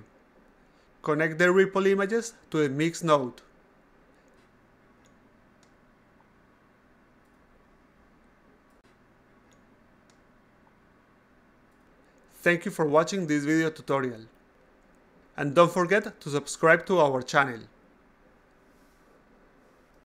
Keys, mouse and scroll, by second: 0.2 click, 1.3 click, 2.4 click, 4.1 click, 4.3 a, 4.6-5.1 drag, 5.8-6.8 drag, 7.1 click, 7.6 click, 7.8 a, 8.4 click, 8.9 click, 9.6 click, 9.9 a, 10.5 click, 11.3-12.0 drag.